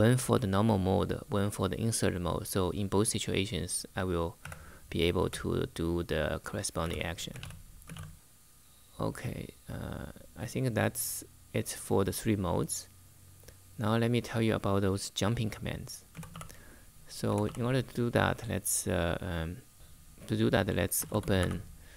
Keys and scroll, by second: 4.1 v, 4.9 v, 6.2-8.1 typing, 16.0 e, 17.0 ,, 19.7 Return, 20.5-21.9 typing.